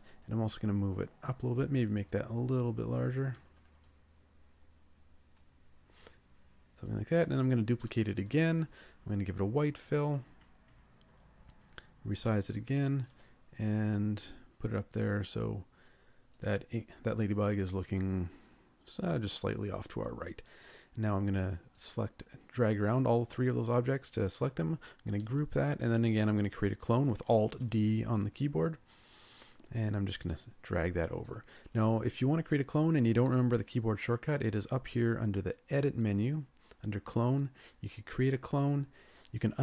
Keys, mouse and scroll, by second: 3.9 ctrl+click, 7.9 ctrl+d, 11.5 ctrl+shift+click, 18.4-20.2 scroll down 1, 25.3 ctrl+g, 27.7 alt+d.